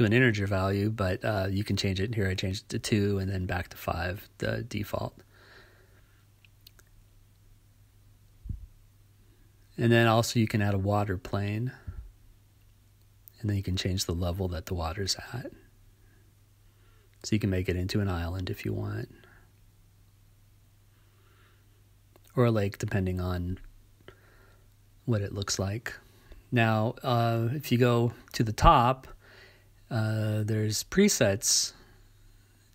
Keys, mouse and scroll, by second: 0.7-2.2 right drag, 2.2 click, 3.1-4.5 right drag, 4.5 click, 10.8 click, 12.6-13.0 scroll down 5, 14.3 click, 23.5 click, 28.4 scroll down 4, 29.3-30.0 scroll up 3.